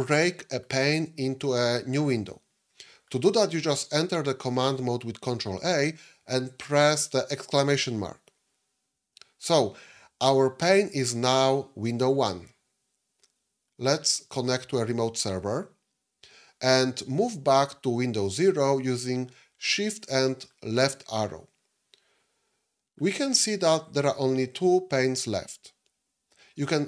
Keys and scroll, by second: 5.6 ctrl+a, 7.1 !, 19.5 shift+Left.